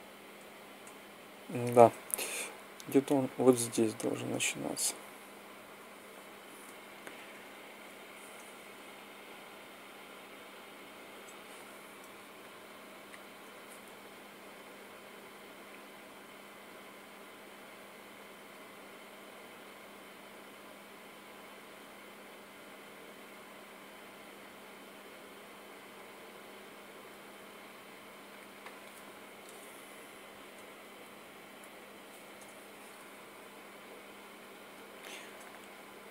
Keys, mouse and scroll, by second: 0.1 Right, 0.6 Right, 3.0 Escape, 7.1 g, 12.8-14.1 drag, 28.0-29.9 drag, 30.3 g.